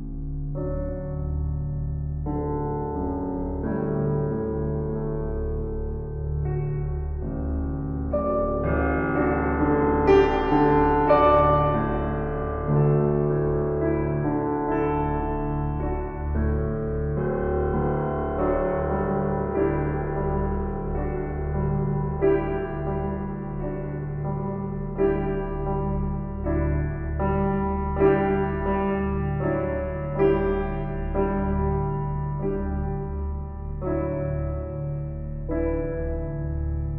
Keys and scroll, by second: 16.4 Delete, 17.4 ctrl+d, 34.1 ctrl+t.